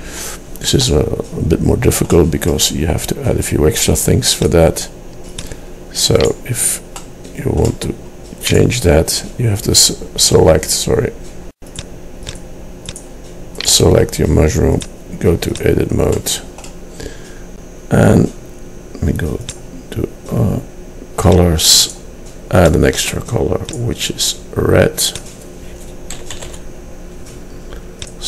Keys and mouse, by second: 1.3 middle click, 1.6 middle click, 16.3 middle click, 16.9-19.3 drag, 19.6-28.2 drag.